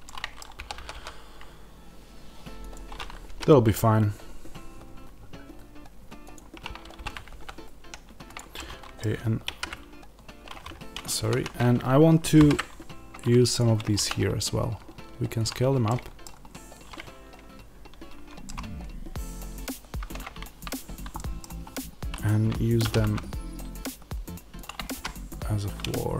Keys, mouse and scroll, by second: 0.4 r, 2.6 click, 3.1 g, 6.2 click, 6.9 r, 8.2 click, 8.4 middle click, 11.1 ctrl+z, 12.2 alt+d, 13.3 middle click, 13.4 click, 13.9 s, 15.3 click, 15.7-24.5 middle drag, 16.1-18.3 drag, 16.1 scroll, 20.6 click, 20.6-21.0 scroll, 21.5-22.8 scroll, 22.8 r, 24.5 click, 24.8 g.